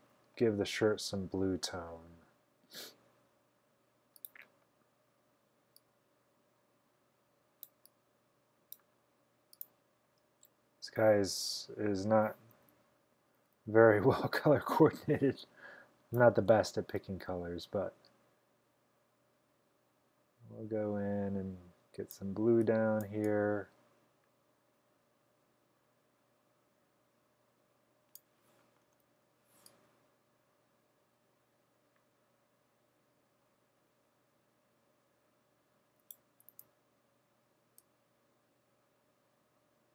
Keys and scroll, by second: 12.6-15.0 typing, 16.2 typing, 28.7-29.4 typing, 36.6 super+z.